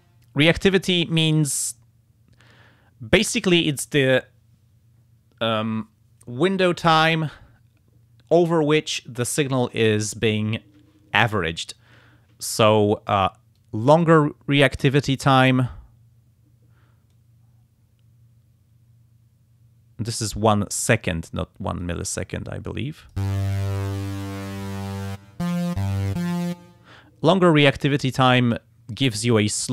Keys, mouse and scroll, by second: 13.6-15.0 drag, 17.1-21.0 drag, 21.8-23.3 drag, 23.9 click, 27.6-28.7 drag, 28.9-29.7 drag.